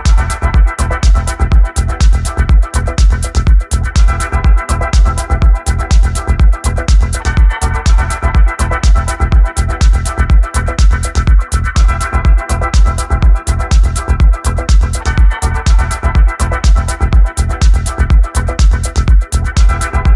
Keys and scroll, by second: 1.2 f, 2.7-5.2 typing, 6.3-7.7 typing, 8.8-9.6 typing, 11.0-15.4 typing, 16.2 Escape.